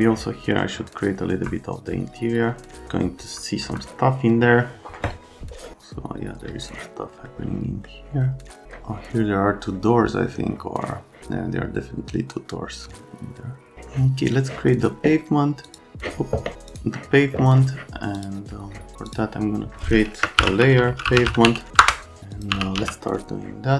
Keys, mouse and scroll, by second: 1.3 F3, 3.2 F3, 3.7 F3, 7.2 scroll down 1, 7.6 right click, 15.7 click, 16.7 click, 18.1 click, 19.1 click, 20.1-23.2 typing, 22.3 click.